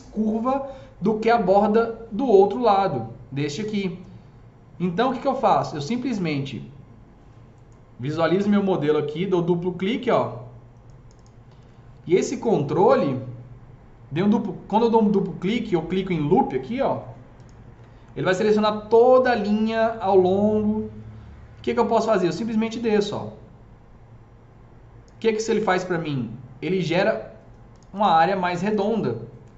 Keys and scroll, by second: 8.0 F3, 11.5 F3.